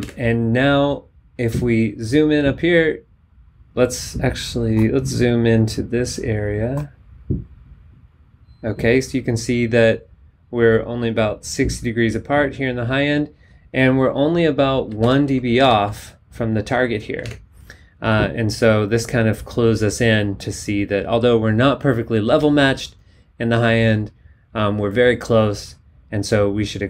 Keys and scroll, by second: 0.0 super+Tab, 15.0 super+Up, 15.6 super+Down, 17.3 super+Tab.